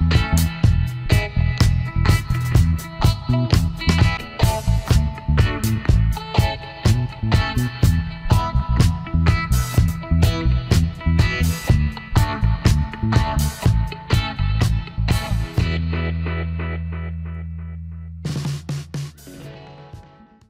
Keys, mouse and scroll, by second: 11.1 alt+scroll down 1, 11.2 space, 11.7 alt+scroll up 1, 12.0 space, 13.9 alt+scroll up 1, 14.3 space, 14.8 alt+scroll down 1, 15.1 space.